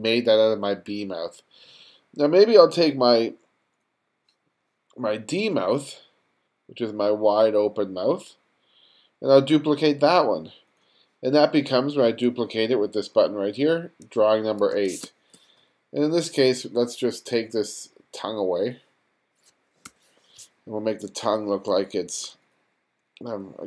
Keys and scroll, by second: 14.3 1, 14.7 space, 19.5 BackSpace.